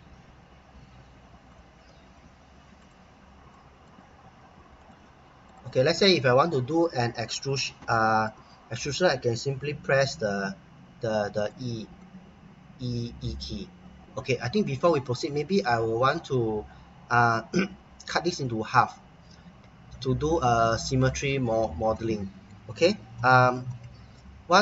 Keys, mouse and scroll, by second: 2.1-2.8 scroll down 1, 3.5 middle click, 4.8 click, 6.1 middle click, 7.9 middle click, 8.4 middle click, 10.2 e, 11.4 click, 12.0 middle click, 16.4-17.5 scroll up 1, 21.2-21.9 scroll up 1, 21.9 middle click, 23.1 middle click, 23.6 middle click.